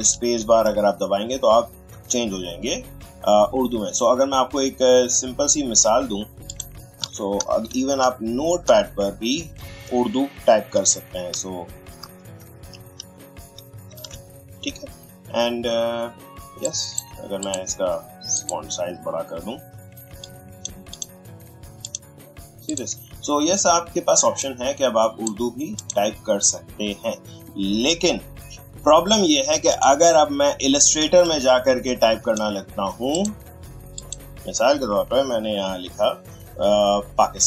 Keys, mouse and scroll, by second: 0.2 super+space, 1.8 super+space, 6.4 click, 6.5 click, 6.7-7.5 typing, 10.7-14.0 typing, 16.6-25.8 drag, 29.7 click, 31.0 space, 31.2 click, 33.1 click.